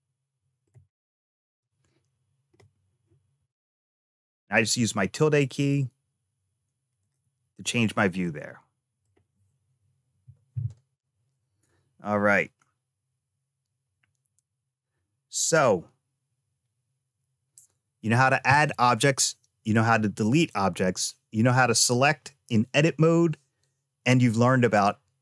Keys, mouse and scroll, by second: 0.8 shift+middle click, 8.1 middle click.